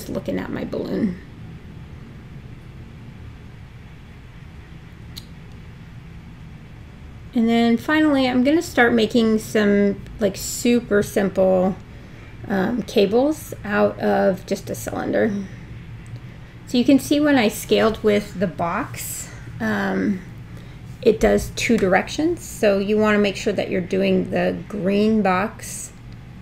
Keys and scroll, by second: 4.5 w, 12.3 r, 15.7 super+z, 23.8 w.